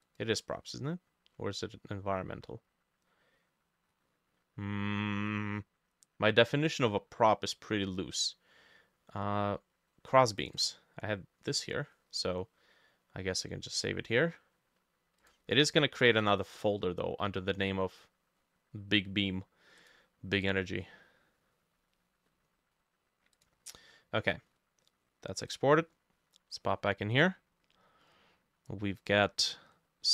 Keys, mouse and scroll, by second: 10.6-12.6 drag.